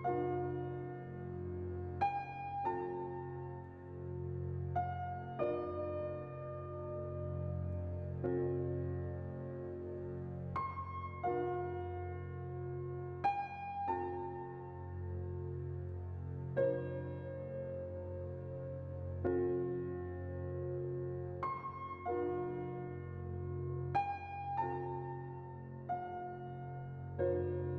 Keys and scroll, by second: 2.7 z, 10.5 a, 14.7 a, 17.3-18.3 typing, 21.9 5, 24.7 2.